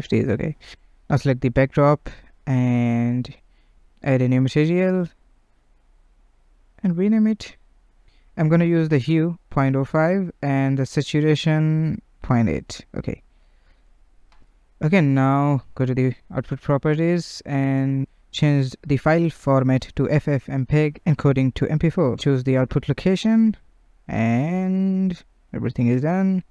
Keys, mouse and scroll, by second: 0.4 click, 7.3 click, 15.3 click, 18.7-22.2 drag.